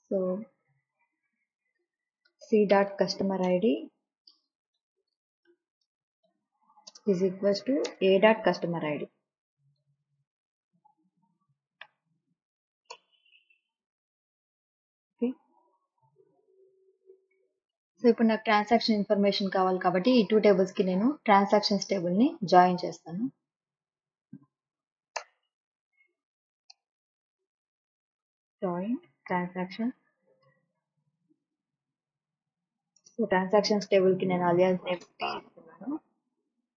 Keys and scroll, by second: 2.0-8.1 typing, 9.5-12.3 typing, 12.9 Return, 14.9 ;, 25.1 Return, 26.7 Return, 27.1 Up, 28.1-31.2 typing, 32.3 Return, 33.0 space, 33.9 t, 35.0 space, 36.1-36.7 typing.